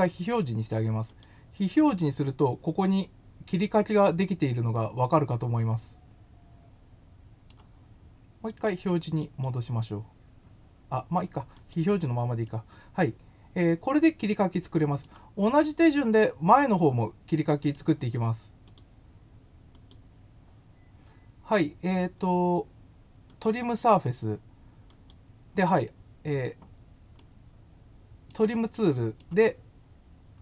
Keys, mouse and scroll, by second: 1.1 click, 1.9 middle click, 6.0-7.4 middle drag, 9.2 right click, 11.5 click, 12.4-15.0 middle drag, 15.7-17.7 middle drag, 18.6 click, 19.7 click, 23.2 click, 24.8 click, 27.1-28.2 middle drag, 28.7 middle click.